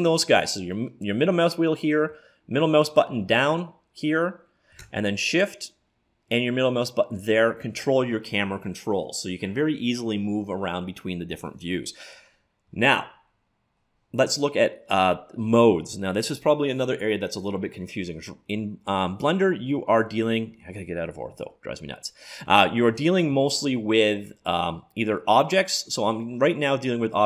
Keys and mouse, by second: 5.1-6.9 middle drag, 18.7-20.5 middle drag, 21.4 KP_5, 23.3 middle click.